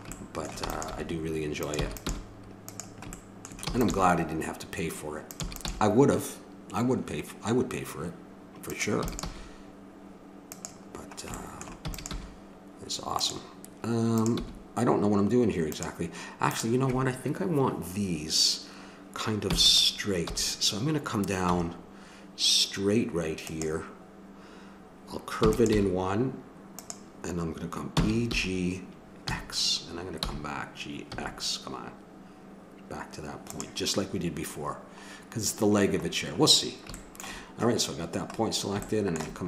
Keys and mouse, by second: 0.7 e, 0.9 g, 1.8 e, 2.1 g, 3.6 e, 3.9 g, 5.4 e, 5.7 g, 9.0 e, 9.4 g, 11.8 e, 12.1 g, 14.2-18.7 drag, 14.4 g, 19.5 e, 20.2 g, 25.4 e, 25.7 g, 27.9 e, 34.0-39.1 middle drag.